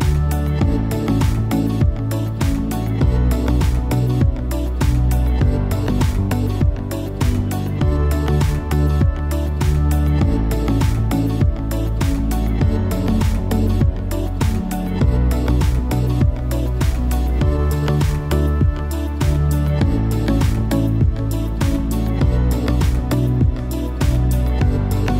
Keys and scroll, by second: 0.1 super+[.